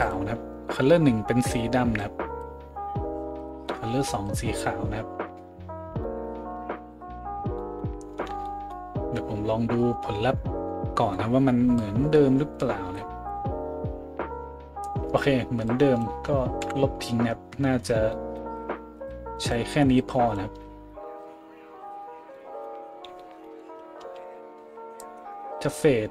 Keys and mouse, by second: 3.4 click, 3.5-11.8 middle drag, 11.8-26.1 drag, 16.6 Delete, 23.7 a, 24.0 a.